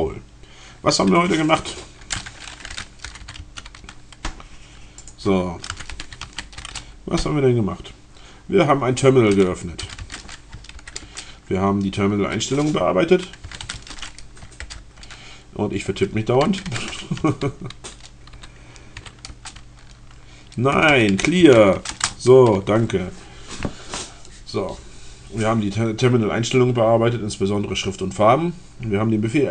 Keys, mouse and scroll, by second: 0.1-0.6 scroll up 2, 2.6 c, 3.3 a, 4.3 scroll up 2, 5.1 click, 5.5-6.9 typing, 9.6-10.6 typing, 10.9 alt+Return, 12.9 c, 13.7 d, 13.8 space, 14.7 alt+Return, 16.4-19.0 typing, 19.3 Return, 20.4-22.1 typing.